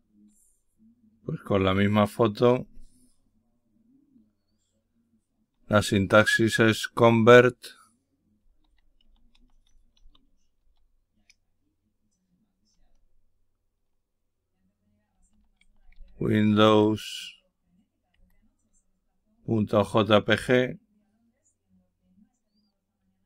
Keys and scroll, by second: 8.1-10.5 typing, 14.8-16.5 typing, 18.0 Tab.